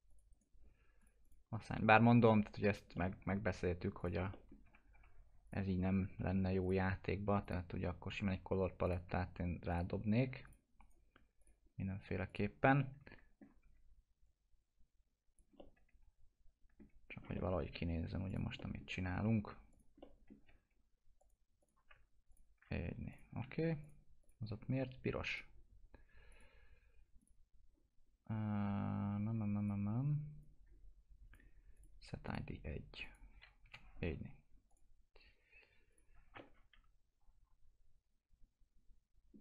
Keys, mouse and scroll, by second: 0.3 right click, 1.0 click, 3.0 middle click, 4.0 click, 4.3 middle click, 4.7 F4, 5.1-5.5 scroll down 1, 5.5 click, 5.8-6.2 scroll up 1, 6.2 F4, 6.6 click, 10.8 right click, 11.4 click, 11.7 scroll up 1, 12.3 click, 12.6 scroll down 1, 12.8 alt+middle click, 13.6 w, 14.3 click, 15.6-17.1 alt+middle drag, 17.1 scroll down 1, 17.4 alt+middle click, 18.3 click, 18.6 middle click, 18.9 scroll down 1, 19.2 F4, 19.7 click, 20.5 alt+q, 21.2 click, 22.3 ctrl+click, 23.4-23.8 scroll up 1, 23.8 click, 24.4-25.3 scroll up 1, 25.3 click, 29.3-29.6 scroll down 1, 29.6-31.7 drag, 33.3 1, 34.7 click, 35.1-35.4 scroll down 1, 35.9 click, 36.4-39.4 alt+middle drag.